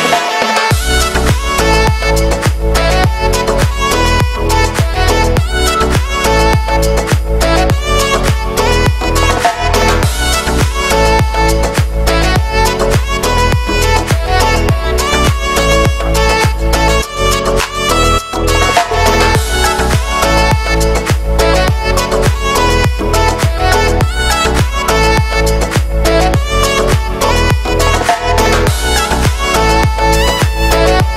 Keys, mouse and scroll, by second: 0.0 click, 0.2 shift+right click, 0.5 scroll down 3, 0.7 middle click, 1.6 e, 4.7 scroll down 1, 4.9 middle click, 5.7 /, 6.3 middle click, 6.9 scroll up 4, 7.2 middle click, 7.9-9.0 drag, 9.0 g, 9.7 middle click, 10.1-10.4 scroll up 1, 10.4 ctrl+r, 11.1 g, 11.7 g, 13.5 click, 13.9 right click, 14.1 middle click, 14.6 shift+right click, 14.7 middle click, 15.0 scroll down 2, 16.3 click, 16.5 middle click, 17.0 e, 18.6 middle click, 19.4 scroll down 1, 19.7 shift+middle click, 20.4 scroll up 7, 20.6 shift+middle click, 21.2-23.5 right drag, 23.5 ctrl+KP_Add, 24.0 middle click, 24.6 y, 24.9 g, 25.4 scroll down 1, 25.5 shift+middle click, 26.1 scroll down 1, 26.2 shift+middle click, 26.4 shift+d, 28.5 shift+middle click, 28.7 shift+d, 30.2 scroll down 1, 30.3 shift+middle click, 30.6-31.0 scroll up 6, 31.0 right click.